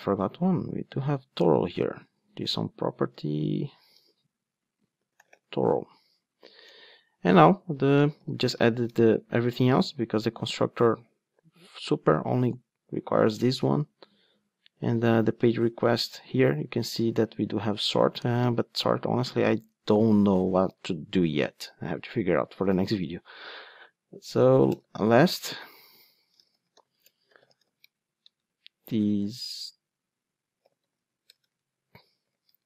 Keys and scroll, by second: 3.0 super+c, 3.9 super+v, 15.0 super+p, 24.7 Return.